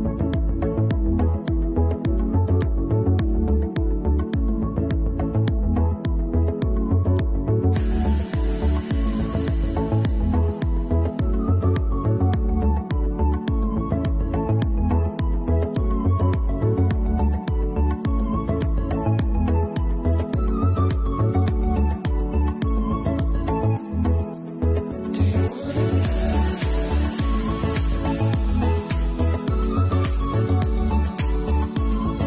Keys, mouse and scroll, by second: 0.1 middle click, 1.6 middle click, 2.7 middle click, 3.8 middle click, 4.6 right click, 6.5 a, 6.5 u, 6.7 u, 7.3 Tab, 8.1 scroll up 1, 8.2-8.6 scroll down 5, 8.5 Tab, 8.6 a, 8.6 u, 17.3 Tab, 17.3 alt+click, 17.3 middle click, 18.5 scroll up 1, 19.2 scroll up 1, 19.5 middle click, 20.2 middle click, 20.2 scroll up 5, 20.8 middle click, 20.8 scroll up 1, 21.2 middle click, 21.7 middle click, 21.7 scroll up 1, 21.9 middle click.